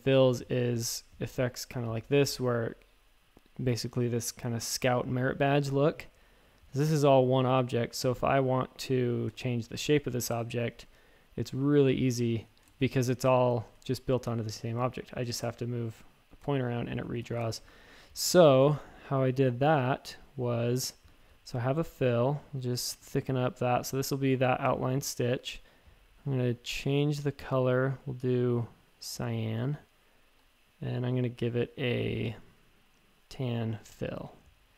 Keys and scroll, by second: 7.0-8.0 typing, 12.4 super+z, 12.7 shift+super+a, 13.7 a, 17.2 super+z, 17.6-18.6 typing, 30.3 x.